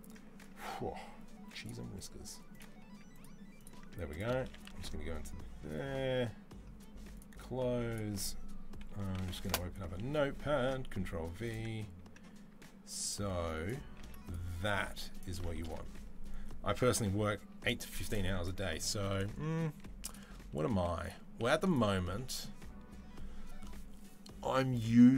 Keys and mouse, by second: 19.5 z, 20.5 z.